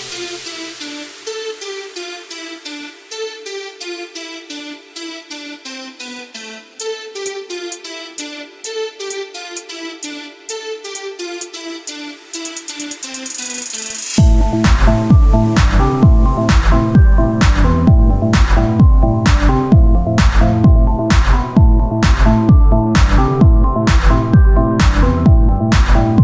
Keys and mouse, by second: 1.9 e, 2.8 s, 3.8-5.0 drag, 5.8 e, 7.2-10.8 drag, 8.6 s, 11.4 e, 14.8 r, 15.5 s, 17.2 click, 17.6-18.7 middle drag, 18.7 e, 21.2 e.